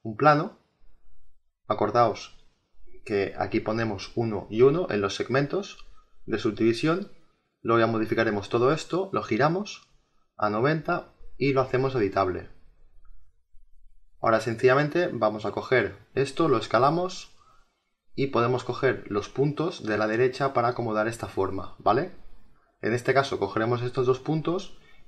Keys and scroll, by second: 3.8 1, 4.4 Tab, 4.7 1, 5.2 Return.